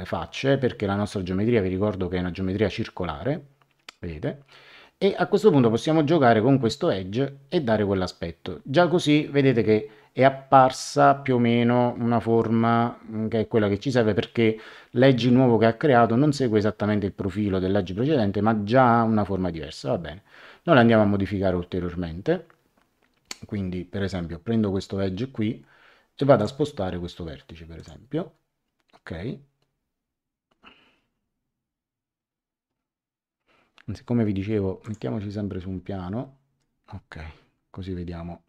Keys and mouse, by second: 5.7 click, 26.3 click, 27.7 click, 34.8 click, 36.2 middle click.